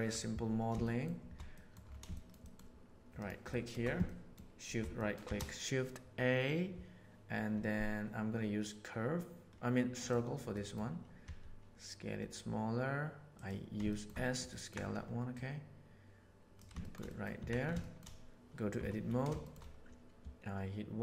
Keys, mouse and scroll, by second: 0.8 middle click, 1.5 middle drag, 2.1-2.5 shift+middle drag, 3.5 shift+middle click, 4.0 middle drag, 4.9 shift+middle click, 5.2 shift+a, 10.5 middle click, 11.1 s, 13.8 shift+middle click, 14.1 ctrl+middle click, 14.5 ctrl+middle click, 15.3-16.5 drag, 16.8 shift+middle click, 17.0 middle click, 17.3 Tab, 17.7 shift+middle click, 18.7 1, 19.4 shift+middle click.